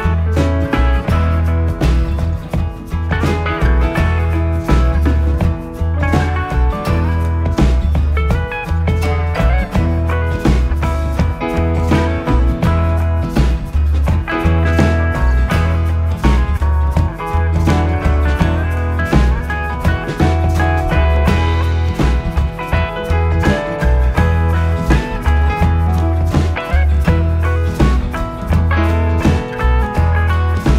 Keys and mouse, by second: 0.4 click, 2.0 alt+click, 3.7 s, 4.4 x, 11.2 click, 13.5 alt+click, 16.5 s, 18.9 click, 21.3 alt+click, 23.3 s, 28.0 click, 29.8 alt+click.